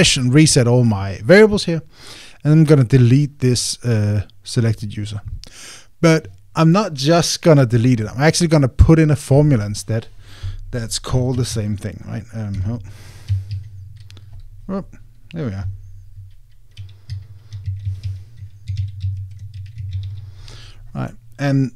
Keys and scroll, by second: 13.3 Escape, 14.3 super+a, 17.9 super+a.